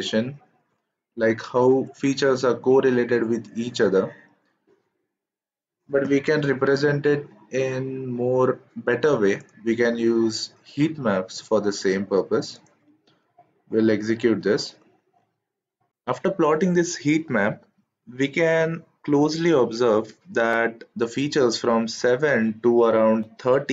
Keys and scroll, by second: 14.1 shift+Return.